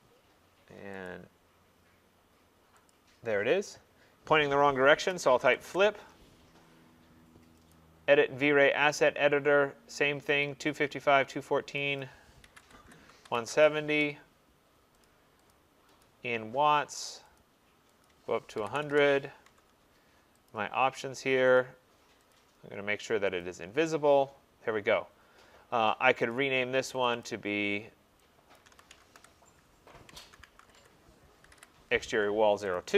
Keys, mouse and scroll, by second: 1.1 click, 3.0 click, 3.4-4.6 scroll, 5.2-5.7 typing, 7.8 click, 10.5 click, 12.0 click, 12.5-13.5 typing, 15.1 click, 15.6 click, 16.5 click, 17.4 click, 18.1 click, 18.4-19.2 typing, 19.5 Tab, 20.5 click, 21.6 click, 22.4 click, 23.5 click, 24.6 typing, 26.4 click, 27.1 click, 27.3 click, 28.6 click, 28.7-32.3 typing, 32.8 click.